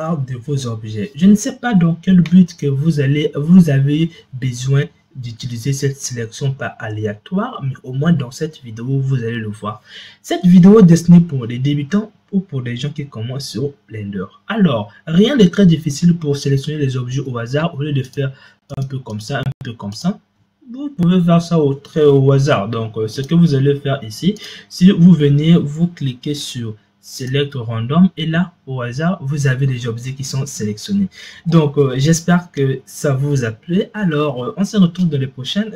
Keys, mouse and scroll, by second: 18.2 shift+drag, 18.7 shift+click, 19.1 shift+click, 19.8 shift+click, 23.0 click, 24.1-27.2 drag.